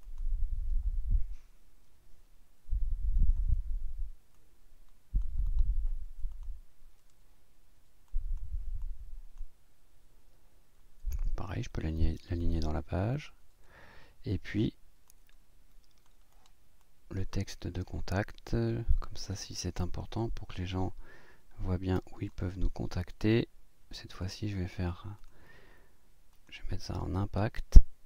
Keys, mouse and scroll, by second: 0.0 click, 4.3 click, 5.5 click, 6.3 click, 8.1 click, 8.8 click, 13.1 click, 14.5 click, 15.1-16.2 drag, 16.3 click, 16.8-22.5 drag, 25.2 click, 26.3 click.